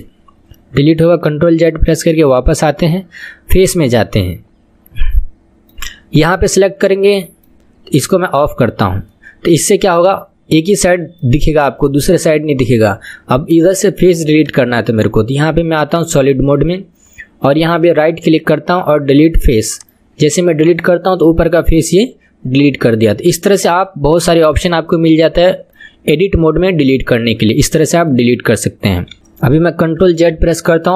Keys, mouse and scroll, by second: 1.9 ctrl+z, 3.6 click, 4.1-6.4 middle drag, 6.4 click, 6.9-8.3 middle drag, 8.3 click, 9.1-11.7 middle drag, 11.7 click, 12.1-13.4 middle drag, 13.4 click, 13.9-14.3 middle drag, 14.3 click, 15.9 click, 16.4-17.7 middle drag, 17.7 right click, 20.0-20.4 right drag, 20.4-23.4 middle drag, 24.2-25.2 scroll up 2, 25.2-26.8 middle drag, 26.8 scroll down 2, 27.1-28.4 middle drag, 28.4-29.1 scroll up 2, 29.1 KP_1, 30.3 ctrl+z.